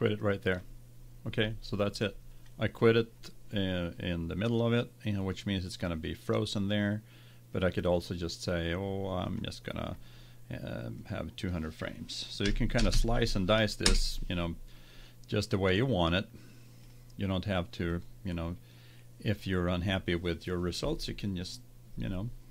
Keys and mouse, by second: 0.2-2.1 drag, 9.2-12.8 drag, 12.9 KP_0, 16.8-19.8 drag.